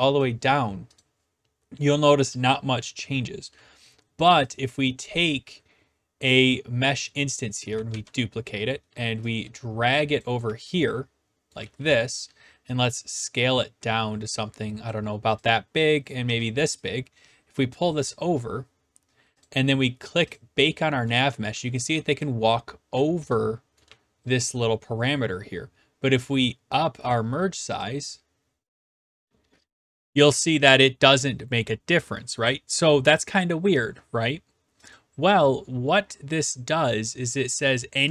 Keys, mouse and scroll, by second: 0.2 click, 1.0 click, 2.3-3.6 typing, 3.4 right click, 4.6 click, 4.9 click, 6.9 right click, 7.6 click, 7.9 ctrl+d, 10.2 click, 10.5-12.1 typing, 11.5 right click, 14.8 click, 16.1-17.2 drag, 16.3 w, 17.9 click, 19.4 click, 20.3 click, 20.9-24.4 typing, 22.0 right click, 23.2 right click, 24.3 right click, 27.1 click, 27.8 click, 29.1 click, 34.9-36.0 drag.